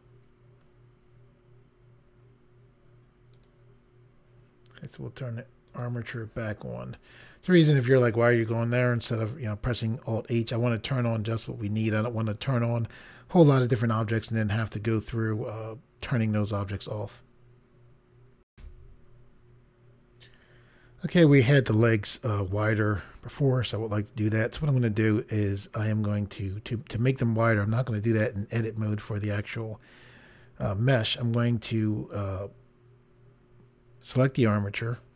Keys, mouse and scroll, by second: 0.3-1.0 scroll down 3, 3.4 click, 5.7 click, 18.5 Pause, 34.0 click.